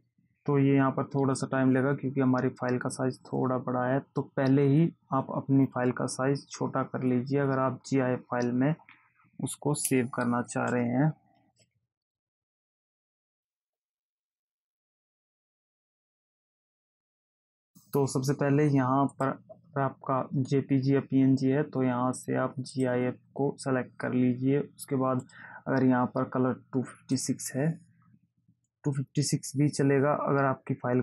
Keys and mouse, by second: 19.5 click, 23.1 click, 25.6 click, 27.5 click.